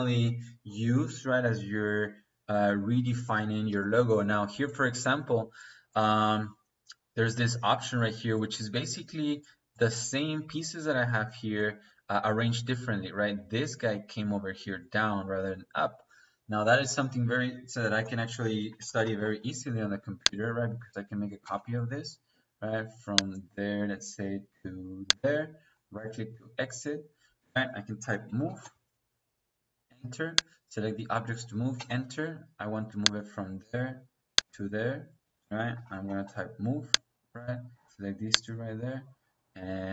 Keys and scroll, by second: 18.2 Escape, 18.6-19.4 typing, 21.4 space, 27.2 Escape, 28.0-28.6 typing, 31.7 -, 35.6 m, 36.0 o, 36.2 e, 36.2 space, 37.6 -.